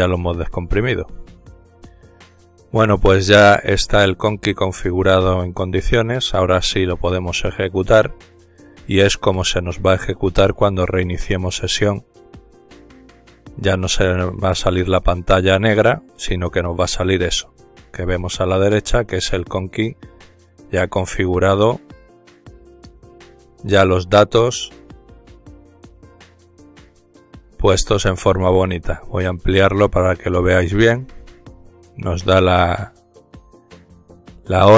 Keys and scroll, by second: 0.3-2.1 typing, 4.2-4.9 typing, 11.9 ctrl+alt+t, 13.6-15.3 typing, 15.5 Return.